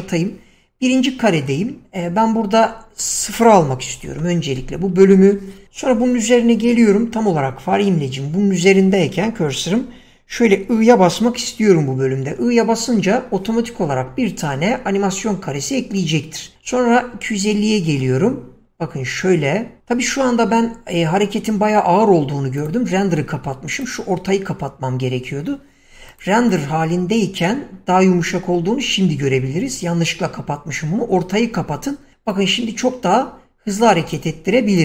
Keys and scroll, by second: 4.2 0, 4.4 Return, 12.6 typing, 29.6 Escape.